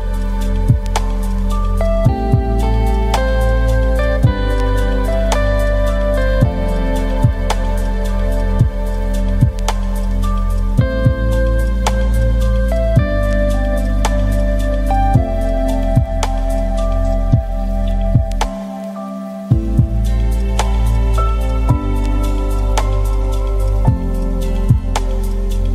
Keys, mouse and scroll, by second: 0.0 r, 1.1 r, 1.7 click, 2.5-4.0 typing, 2.7 shift+click, 4.6 click, 5.1 g, 5.8 r, 6.6 click, 7.4 r, 7.9 r, 8.8 g, 9.3 click, 10.1 scroll up 1, 10.3-10.8 scroll down 1, 10.8 click, 11.5 shift+click, 12.3 scroll up 1, 12.5-12.9 scroll down 1, 12.9 ctrl+z, 13.1 shift+click, 15.0-16.5 shift+drag, 16.5 g, 17.1 g, 18.8-19.7 scroll up 2, 20.0 shift+click, 20.7 shift+middle click, 21.1 scroll down 1, 21.2 scroll up 1, 21.5-21.8 scroll down 1, 21.8-22.3 scroll up 1, 22.3-22.9 scroll down 2, 22.9 shift+click, 24.1 KP_0, 24.4 click, 25.2 scroll down 10, 25.3 middle click.